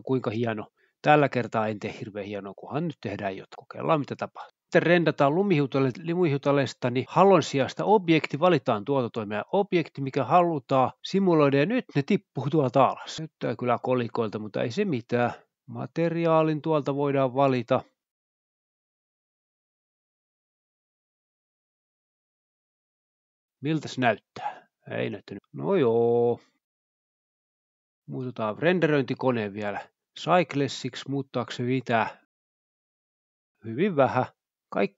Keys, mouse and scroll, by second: 1.4 click, 2.4 click, 4.0 click, 4.8-6.1 scroll down 2, 6.1-6.7 drag, 6.9-7.4 drag, 7.8-8.3 drag, 8.3 scroll down 1, 9.1 click, 9.8 click, 11.9-14.2 drag, 14.6 0, 14.8 0, 16.2-16.6 typing, 17.0 click, 17.7 click, 18.5 click, 20.3-20.7 drag, 22.3 click, 24.7 F12, 25.9 Escape, 28.0-28.8 drag, 29.2 F12, 30.3 Escape, 31.1 click, 31.8 click, 32.3 click, 33.2 F12.